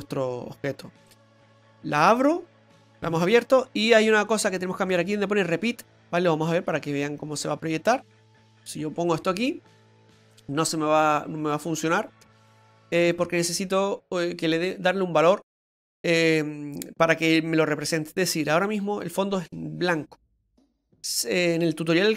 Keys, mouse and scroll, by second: 16.2 typing.